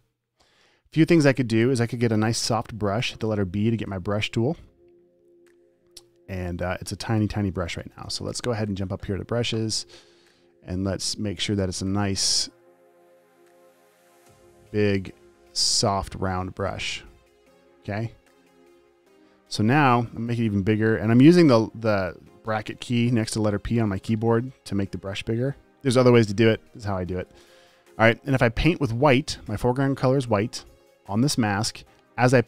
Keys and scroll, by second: 3.4 b, 7.5-8.6 typing, 21.0-21.6 typing, 26.7 ].